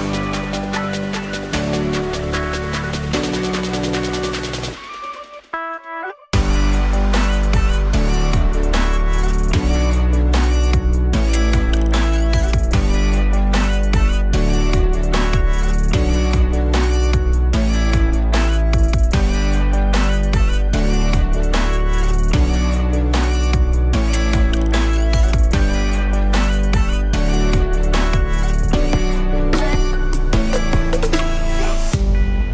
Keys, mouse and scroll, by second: 0.5 click, 2.3-4.2 drag, 5.1 click, 6.0-6.6 scroll up 3, 6.6 click, 7.5 KP_0, 8.9 click, 9.7 KP_0, 10.7 click, 11.5 KP_0, 13.8 click, 14.7-15.4 scroll up 1, 15.4 click, 15.8-18.6 alt+drag, 18.6 KP_0, 20.8-22.0 alt+drag, 22.0 middle click, 22.8 click, 23.8 KP_0, 25.6-26.6 scroll down 1, 26.6 KP_0, 27.9-30.6 scroll up 1.